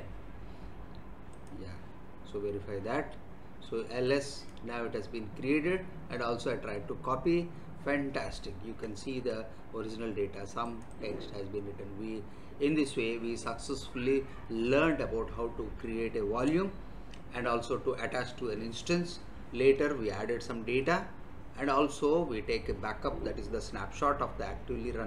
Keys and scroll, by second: 9.1 alt+Tab.